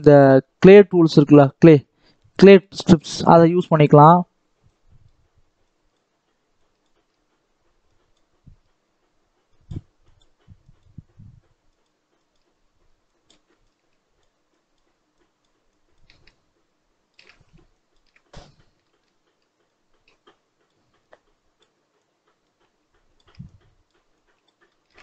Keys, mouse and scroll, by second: 2.3 shift+middle click, 3.0-3.5 scroll up 1, 3.5-4.6 shift+middle drag, 4.6-18.4 drag, 18.4-18.7 scroll up 1, 18.7 shift+middle click, 19.5-24.5 shift+drag, 24.5 shift+middle click.